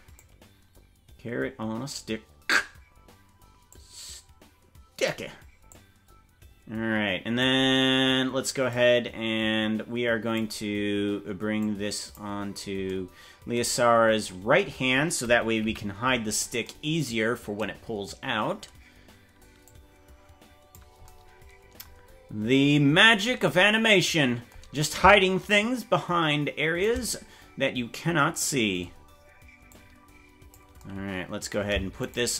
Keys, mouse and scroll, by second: 0.2-2.5 drag, 3.7-5.1 drag, 5.7-7.4 drag, 8.7-10.4 drag, 11.6 click, 15.6 KP_Decimal, 16.3-16.6 scroll down 5, 19.6-20.7 drag, 25.5-26.8 shift+drag, 29.7 click, 32.1 shift+right click.